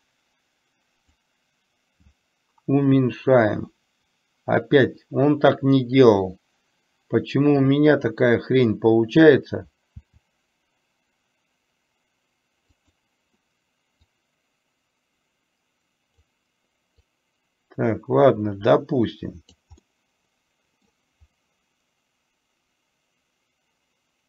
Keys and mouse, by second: 1.4-8.3 drag, 10.1 r, 14.3-16.4 drag, 17.1-19.6 drag, 19.9-20.9 middle drag.